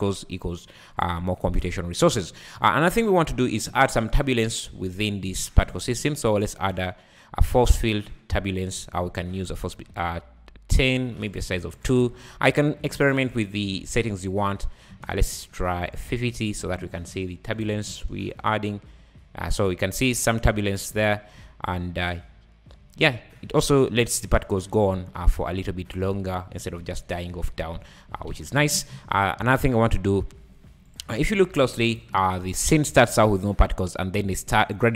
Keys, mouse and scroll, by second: 1.2 Escape, 1.6 `, 2.3-3.0 scroll up 1, 3.7 space, 3.9-4.5 scroll up 1, 4.5 space, 5.4-5.7 scroll down 4, 5.9 shift+a, 9.4-10.8 drag, 11.3 click, 12.3-12.7 scroll up 2, 13.3 shift+right click, 13.7 space, 14.9 space, 15.8 click, 17.6 shift+right click, 17.9 space, 26.0 `, 26.3 scroll down 4, 26.9 `, 27.7 `, 28.3 Escape, 29.7 click, 30.9 click, 31.9 shift+right click, 32.4-33.1 scroll up 5, 32.5 `, 33.1 space, 34.8 Escape.